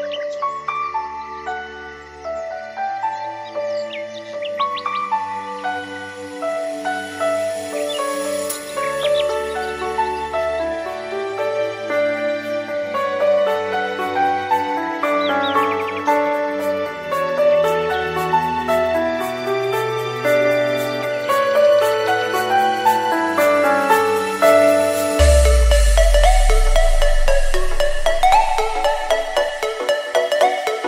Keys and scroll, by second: 10.2 Escape, 12.5 space.